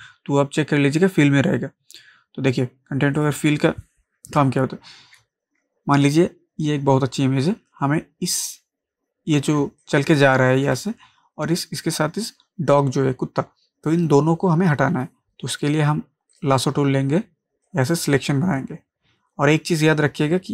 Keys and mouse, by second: 3.2 click, 5.2 space, 9.6 ctrl+space, 9.8 ctrl+click, 9.8 ctrl+click, 10.1 ctrl+space, 16.3-20.5 drag.